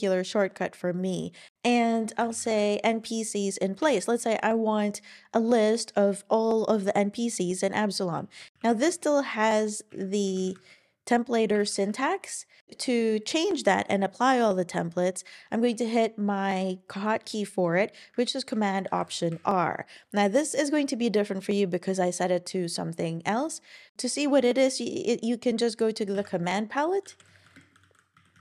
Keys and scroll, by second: 1.5 super+;, 2.0-2.9 typing, 3.8 Return, 8.4 Page_Up, 8.5 ctrl+alt+i, 8.7 Up, 8.9 Down, 9.4 Right, 9.9 Down, 10.3 alt+Right, 11.5 Up, 11.7 Up, 11.8 Up, 18.8 ctrl+alt+r, 26.1 super+p, 26.8-27.9 typing.